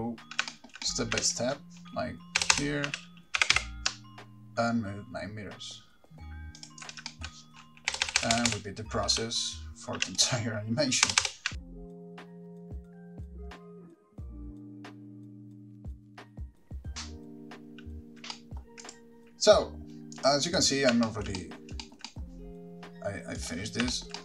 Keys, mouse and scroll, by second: 0.7 shift+middle click, 1.1 middle click, 1.4 g, 1.6 click, 2.6 Right, 2.7 Right, 3.2 g, 6.9 ctrl+click, 7.3 shift+middle click, 8.1-8.7 Right, 9.4 Left, 10.3 g, 10.4 click, 11.3 Right, 11.4 Right, 11.5-16.0 typing, 11.7 ctrl+click, 11.7 shift+middle click, 11.7 shift+middle click, 11.8 Right, 11.8 Left, 11.9 Left, 11.9 click, 12.1 ctrl+click, 12.1 Right, 12.2 Right, 12.2 Left, 12.3 click, 12.3 shift+middle click, 12.3 scroll down 2, 12.5 Right, 12.5 ctrl+click, 12.5 Left, 12.6 click, 12.7 ctrl+click, 12.8 Right, 12.8 Left, 12.9 click, 12.9 Right, 13.1 Right, 13.1 Right, 13.1 Left, 13.3 ctrl+click, 13.4 Right, 13.4 middle click, 13.4 scroll down 5, 13.6 click, 13.8 Right, 13.8 Left, 13.8 ctrl+click, 13.8 click, 14.0 Right, 14.0 Left, 14.0 ctrl+click, 14.2 click, 14.2-15.1 Right, 14.2 ctrl+click, 14.3 Right, 14.3 Left, 14.3 click, 14.5 Right, 14.5 ctrl+click, 14.6 Left, 14.6 click, 14.6 shift+middle click, 14.6 scroll down 2, 14.8 Left, 14.8 shift+middle click, 15.0 Left, 15.0 Right, 15.0 ctrl+click, 15.1 Left, 15.1 ctrl+click, 15.2 ctrl+click, 15.3 ctrl+click, 15.5 Right, 15.5 ctrl+click, 15.6 Right, 15.6 Left, 15.6 click, 15.6 Right, 15.8 ctrl+click, 15.8 Right, 15.8 Left, 15.9 click, 16.0 ctrl+click, 16.1 Right, 16.1 Left, 16.2 click, 19.0 middle click, 19.0 click, 20.4 click, 20.7 click, 21.3 shift+middle click, 21.6 middle click, 22.0 shift+middle click, 22.3 middle click, 23.6 click, 24.1 shift+middle click.